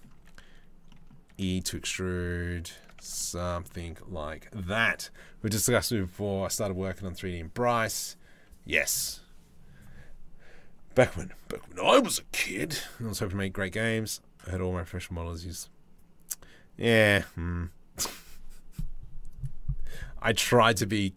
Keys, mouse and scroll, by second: 0.5 click, 0.9 e, 2.6 Tab, 2.8 click.